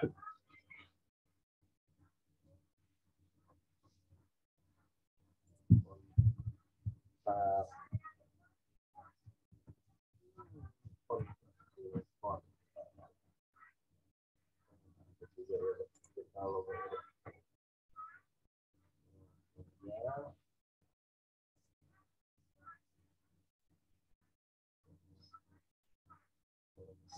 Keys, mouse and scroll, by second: 3.8 scroll up 1, 5.4 click, 9.4-11.3 typing, 13.4 scroll down 1, 14.4 scroll up 1, 15.9 click, 16.8 scroll down 1, 21.5 click, 22.9 right click, 24.9-25.3 scroll down 1, 26.7 click.